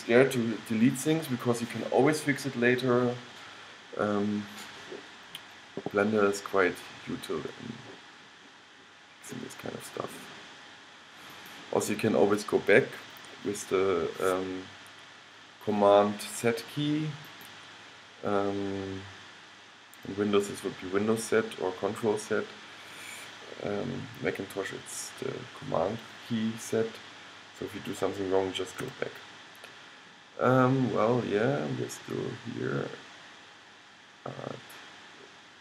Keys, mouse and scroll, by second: 7.1-9.9 middle drag, 11.5-15.5 drag, 17.5-22.7 drag, 29.0 g.